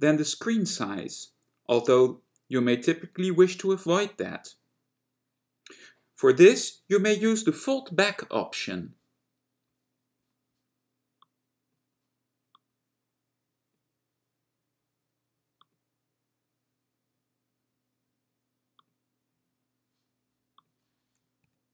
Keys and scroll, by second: 21.5 F10.